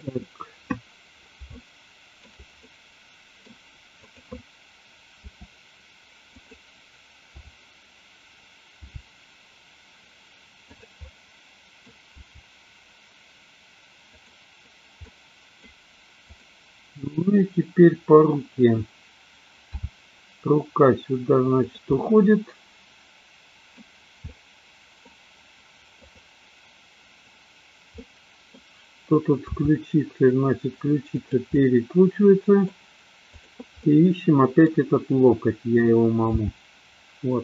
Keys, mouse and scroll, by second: 1.6 shift+middle click, 2.6-3.6 middle drag, 5.2 r, 6.4 click, 7.2 f, 8.8 g, 10.7 click, 11.1-11.8 middle drag, 12.2 g, 14.2 click, 14.9 middle click, 16.2 click, 17.2-18.2 middle drag, 19.8 g, 21.6 click, 21.9-23.7 middle drag, 24.3-24.9 middle drag, 25.9 click, 27.9-28.6 middle drag, 29.4 r, 31.2 click, 31.6-32.7 middle drag, 33.3 click, 33.9 middle click, 36.3 g.